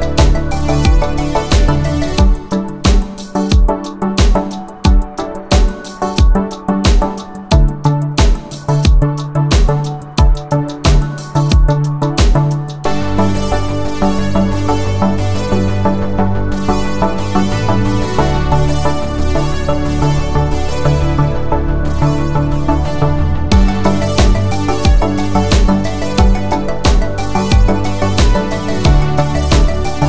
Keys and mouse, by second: 1.0 middle click, 1.7 ctrl+middle click, 2.6-3.6 middle drag, 3.6-4.6 drag, 3.6-4.6 right drag, 6.4 g, 8.9 g, 13.5 shift+click, 14.8 shift+middle click, 15.8-17.1 middle drag, 18.3 middle click, 19.3 shift+middle click, 20.3 g, 24.7 shift+click, 24.7 shift+right click, 25.4 Tab, 28.3 click, 28.8 shift+drag, 28.8 shift+right drag, 29.3 click, 29.8-30.0 middle drag.